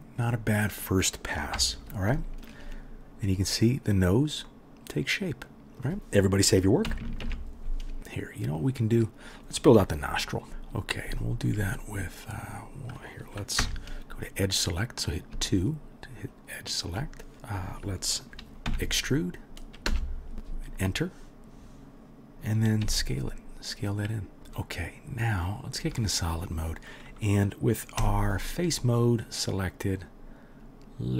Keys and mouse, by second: 0.2 click, 0.3-7.3 middle drag, 1.6 KP_1, 6.9 KP_1, 7.3 ctrl+click, 7.3 ctrl+s, 8.0 ctrl+z, 8.8-12.4 middle drag, 12.4 click, 12.5-14.8 middle drag, 13.6 2, 14.8 click, 15.0-16.7 middle drag, 16.7 shift+click, 16.8-24.3 shift+middle drag, 18.7 e, 22.8 s, 24.4-25.2 middle drag, 25.2 click, 25.3-26.2 middle drag, 26.2 click, 26.2-28.4 middle drag, 28.0 3, 28.4-29.1 drag, 29.1-31.1 middle drag.